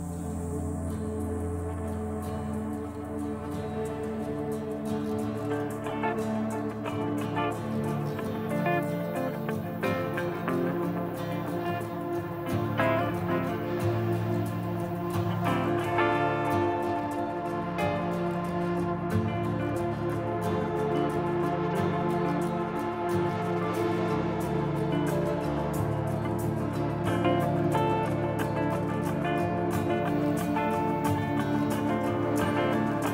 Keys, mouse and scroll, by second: 0.8 click, 6.9 click, 9.7 click, 16.7 click, 22.2 click, 28.5 click, 31.6 click.